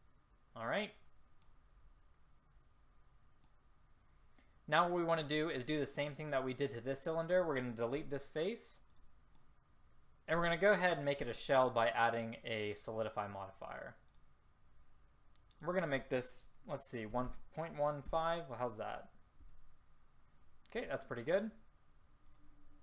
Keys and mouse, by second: 2.8-4.4 middle drag, 8.1 Delete.